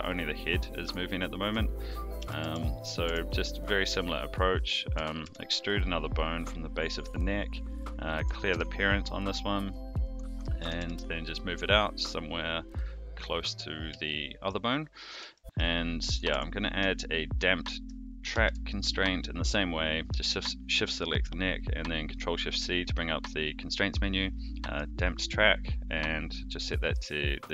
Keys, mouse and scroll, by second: 2.2 alt+g, 2.4 alt+r, 3.0 Tab, 3.7 click, 4.2 click, 4.9 e, 7.3 click, 7.7 click, 8.5 alt+p, 10.6 g, 14.0 shift+middle click, 15.3 shift+middle click, 16.1 click, 16.3 Tab, 17.6 shift+click, 18.3 ctrl+shift+c, 26.8 click.